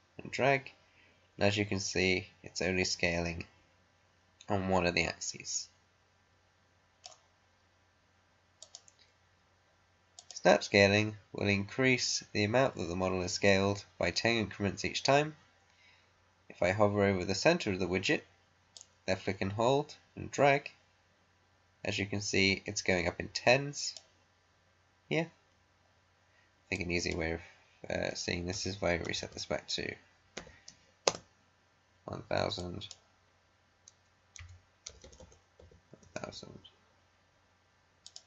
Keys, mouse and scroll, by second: 8.5 click, 10.1 click, 18.7-26.7 drag, 26.7-28.4 drag, 28.4-29.2 typing, 30.3 0, 31.0 Return, 32.5-34.3 drag, 34.3-35.5 typing, 36.2 Return.